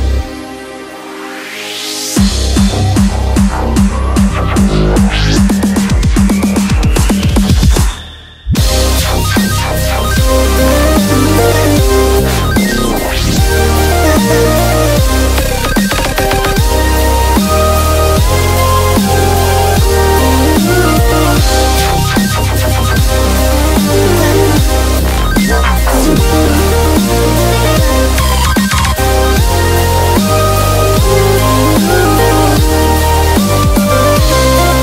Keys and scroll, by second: 13.5 b, 15.0-15.5 typing, 17.8 super+t, 24.6 super+[, 26.5-28.0 typing, 32.0 super+t.